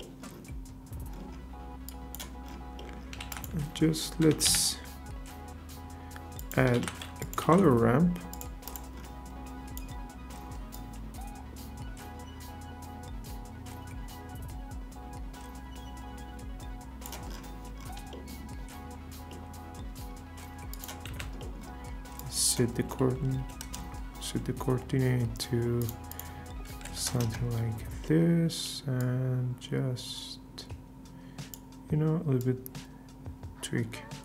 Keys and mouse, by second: 1.9 click, 3.2 shift+a, 6.7 shift+a, 9.3-9.8 drag, 10.8-17.0 drag, 19.3 middle click, 20.7 click, 21.1 ctrl+t, 22.2-23.7 drag, 25.8 click, 26.1-27.3 drag, 28.0 middle click, 29.0-31.5 shift+drag, 32.5-34.2 shift+drag.